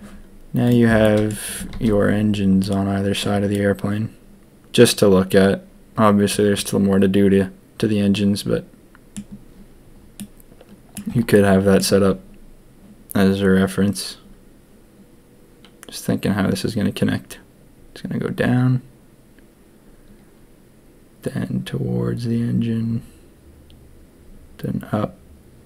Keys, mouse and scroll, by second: 1.0 click, 1.8 ctrl+s, 2.6-3.1 middle drag, 3.5-9.1 middle drag, 10.1-10.9 middle drag, 11.3 middle click.